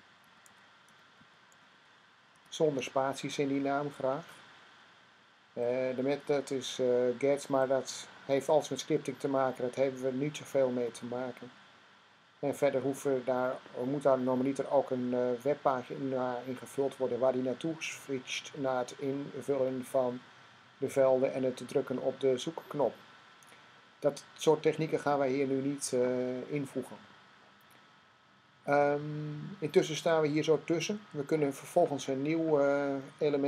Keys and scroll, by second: 0.0-2.2 typing.